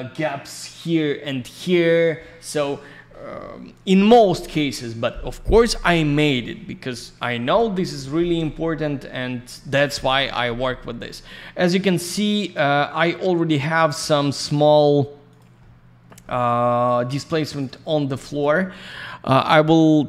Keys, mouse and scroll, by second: 1.7 scroll down 1, 7.9-8.4 scroll up 1, 8.4 scroll down 1, 10.7-11.4 scroll down 1, 12.3 click, 13.7 alt+middle click, 14.4 click, 14.5 click, 15.2 click, 15.3 click, 15.5 alt+middle click, 16.2 middle click, 17.0 alt+я, 17.2 click, 17.7 alt+middle click, 18.2 click, 18.3 click, 19.4 click, 19.5 click.